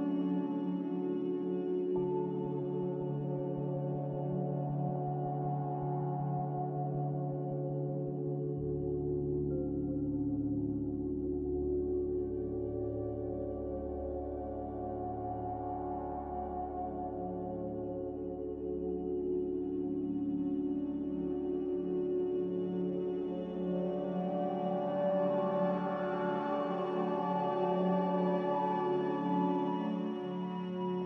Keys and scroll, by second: 4.7 Delete, 6.5 Delete, 25.7 s, 26.9 Escape, 30.0 g.